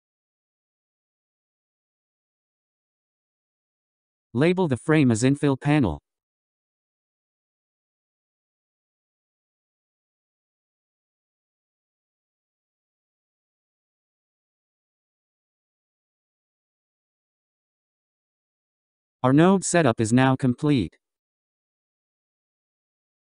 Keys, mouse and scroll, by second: 2.8 shift+p, 4.4 n, 5.5-8.7 drag, 9.3 l, 13.9-16.0 drag, 17.7 n, 18.3-19.7 scroll down 9, 19.7 scroll up 2.